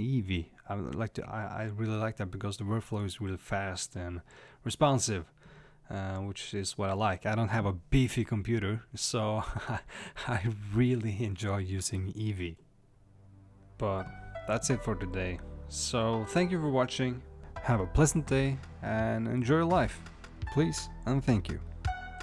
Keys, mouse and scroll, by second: 5.0-8.6 middle drag, 8.6 click, 9.2 click, 9.8-10.8 middle drag, 15.7-17.0 middle drag.